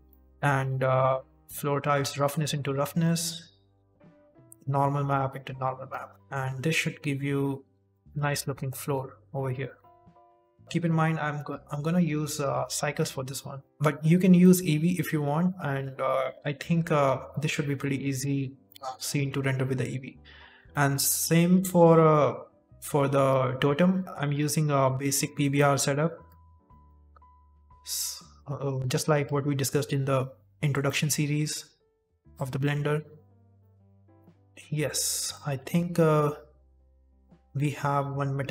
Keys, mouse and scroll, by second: 21.5 click.